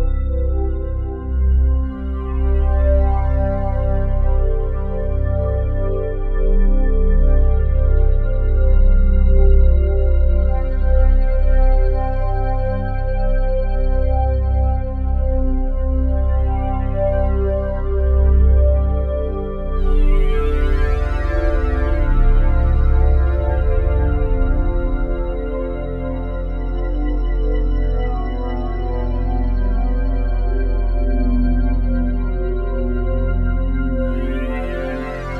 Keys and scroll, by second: 9.8 s, 29.7 s.